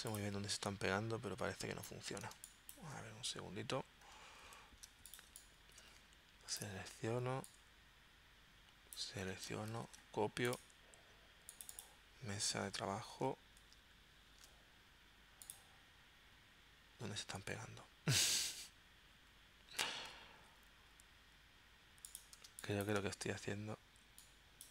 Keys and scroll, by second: 2.3 space, 4.9 super+c, 9.7 super+c, 13.6 shift+super+v, 22.5 space.